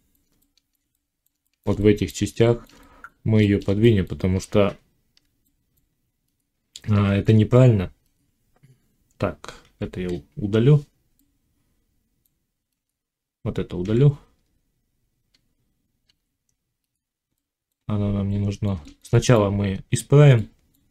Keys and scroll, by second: 4.3 Tab, 9.6 l, 16.0 x.